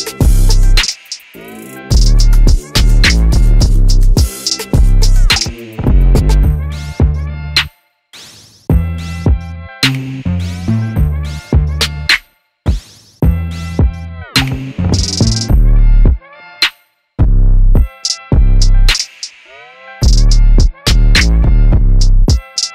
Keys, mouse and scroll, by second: 1.4 KP_5, 3.9-5.1 scroll up 4, 5.1 right click, 7.3 Tab, 9.9 click, 11.2 right click, 11.8 middle click, 13.6-14.2 scroll down 1, 15.9 shift+s, 21.6 click.